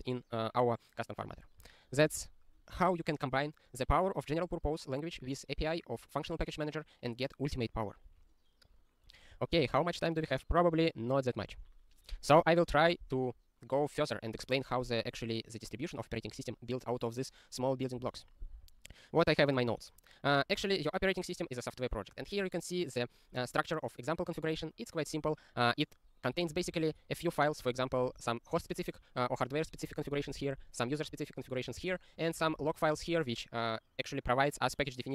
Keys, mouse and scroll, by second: 8.3 scroll down 3, 9.1 click, 9.7 ctrl+s, 18.0 ctrl+g, 18.8 scroll down 1, 19.5-20.0 scroll up 12, 20.0 scroll down 1, 20.5-24.4 scroll, 26.3 click, 26.6 ctrl+a, 26.7 ctrl+space, 26.8 ctrl+n, 26.9 ctrl+n, 27.7 ctrl+g, 28.0 ctrl+space, 28.1 ctrl+p, 28.6 ctrl+g, 29.7 ctrl+n, 29.8 ctrl+n, 29.9 ctrl+n, 30.1 ctrl+n, 30.3 ctrl+space, 30.4 ctrl+n, 31.7 ctrl+g, 32.4 click, 32.5 ctrl+a, 32.6 ctrl+space, 32.7 ctrl+n, 33.0 ctrl+g.